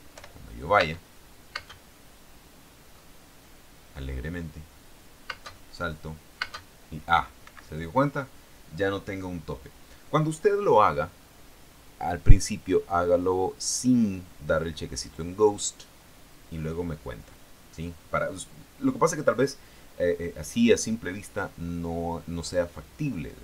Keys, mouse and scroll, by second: 0.3 p, 1.0 space, 1.8 space, 6.1 space, 6.6 space, 7.6 Escape.